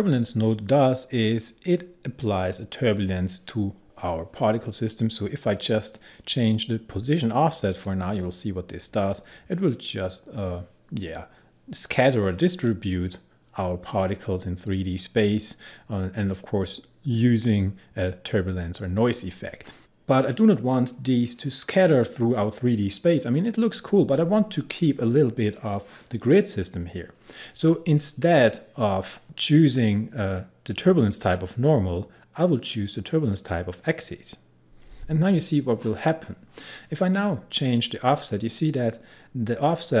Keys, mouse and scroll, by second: 0.4-1.0 scroll down 1, 7.9-13.1 drag, 31.4 click, 33.9 click, 37.1-40.0 drag.